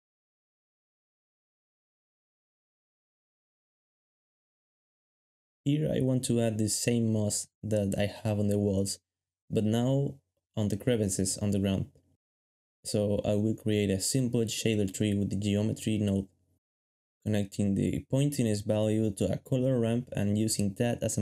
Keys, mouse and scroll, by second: 12.2-15.0 typing, 15.8 ctrl+shift+click, 16.5 ctrl+shift+click, 17.7 ctrl+shift+click, 18.6 g.